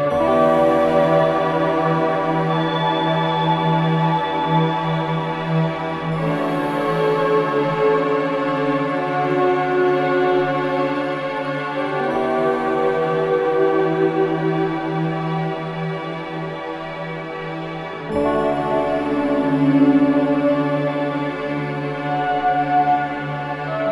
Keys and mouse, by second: 2.1 click, 3.4 ctrl+s, 4.1-5.2 drag, 5.2 g, 5.5 x, 7.2-8.0 drag, 8.0 typing, 8.9 click, 9.8-11.1 typing, 11.4 click, 12.2-14.9 typing, 13.2-14.2 drag, 15.1-16.1 drag, 15.9-16.3 typing, 17.7 click, 18.4-18.8 typing, 19.6-20.6 drag, 20.8-23.2 alt+shift+drag, 23.6 typing.